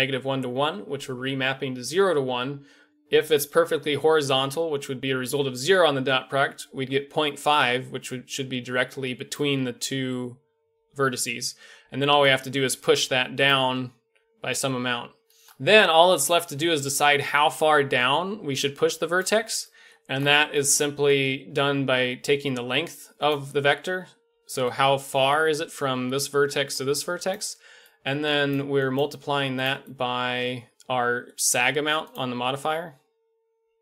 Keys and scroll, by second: 7.4-9.5 d, 10.0 d, 11.9-13.6 d, 17.2 d, 19.2 d, 19.3 d, 23.7-24.6 d, 27.3 d, 27.4 d, 27.4 d.